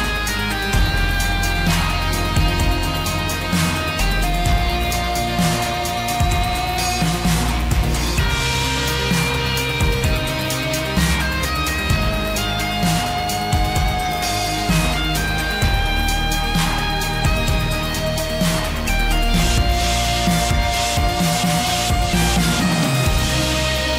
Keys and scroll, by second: 4.2 ctrl+t.